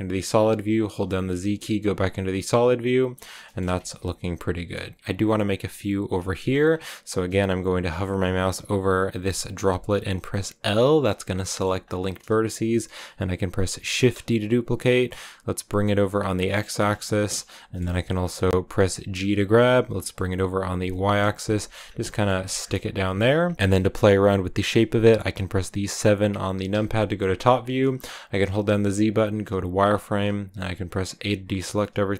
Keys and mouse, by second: 0.8 z, 1.5-3.1 drag, 3.4 shift+click, 3.7 Tab, 3.9 click, 4.7 Tab, 4.9 click, 6.3 shift+click, 11.3 shift+l, 11.3 shift+click, 14.0 shift+d, 15.2 click, 16.7 click, 17.0 shift+middle click, 17.4 middle click, 19.2 g, 19.7 y, 21.0 click, 21.3 click, 22.0 shift+click, 22.4 click, 22.6 g, 23.1 click, 27.6 KP_7, 27.7 shift+click, 28.8 z, 31.1 a.